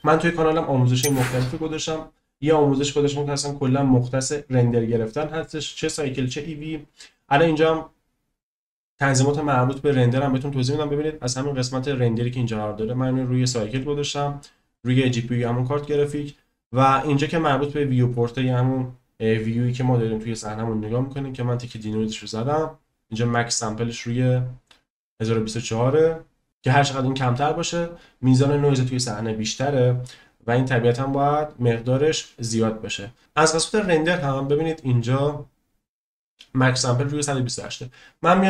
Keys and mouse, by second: 13.4 click, 14.8 click.